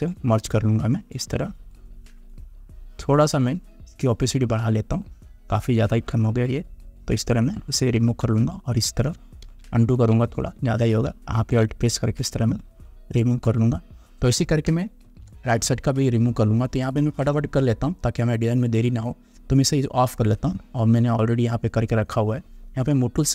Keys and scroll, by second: 9.6 ctrl+z, 15.2 ctrl+0.